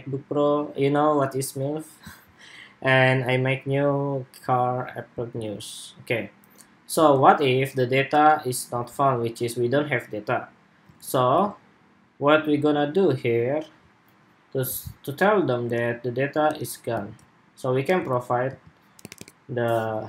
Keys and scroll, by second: 6.7 super+Tab, 10.7 super+Tab, 11.1 super+Tab, 16.8 super+s.